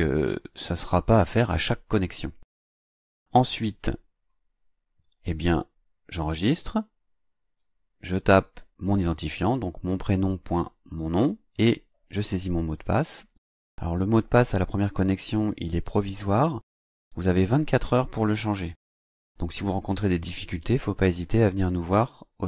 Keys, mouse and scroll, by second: 4.1 click, 6.1 click, 11.5 click, 12.5-22.4 drag.